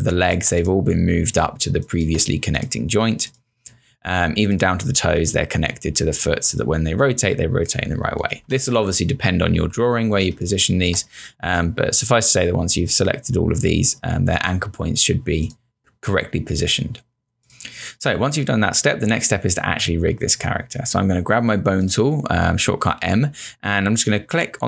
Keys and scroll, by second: 8.3 z, 10.3 space.